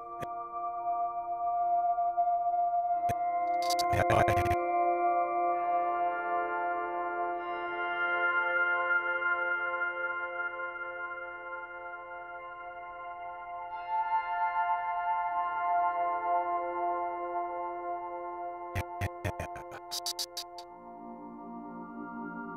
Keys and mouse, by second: 0.0 space, 3.0-6.2 drag, 7.8 click, 9.7 click, 10.3 click, 11.5-13.8 drag, 18.7 Right, 18.9 Right, 19.2 Right, 19.3 Right, 19.5 Right, 19.6 Right, 19.8 Right, 20.0 Right, 20.1 Right, 20.3 Right, 20.5 Right, 21.9 s, 22.2 z.